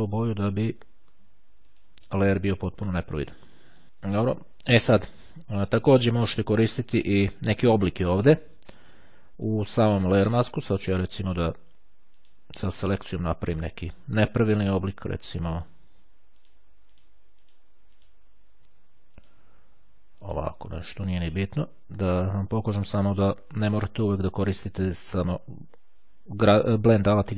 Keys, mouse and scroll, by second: 1.2-2.4 drag, 3.7 right click, 7.0-8.2 drag, 8.2 click, 11.6-12.8 drag, 14.2-15.4 drag, 15.6 click, 16.5 click, 17.5 click, 18.0 click, 19.2 click, 20.3 click, 21.2 click, 22.0 click.